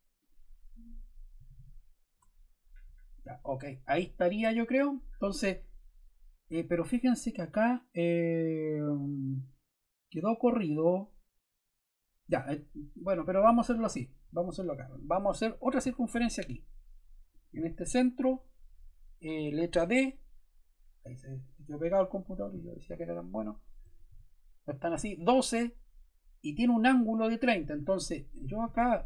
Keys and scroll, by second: 1.3 d, 2.1 Return, 19.6 d, 23.8 1, 24.0 2, 24.8 Return.